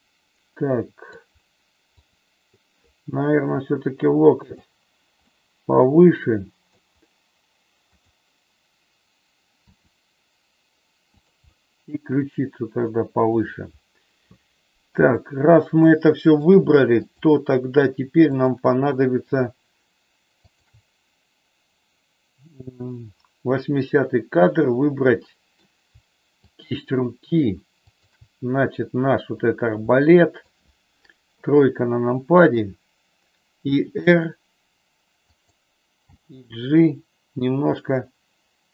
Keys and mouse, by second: 1.9 click, 3.3 g, 5.2-6.7 middle drag, 9.7 r, 11.4-13.3 middle drag, 15.8 shift+middle click, 17.1 click, 20.5 shift+click, 25.1 middle click, 26.4 shift+click, 27.8 shift+click, 29.9 middle click, 31.3 KP_3, 33.5 r, 36.1 g.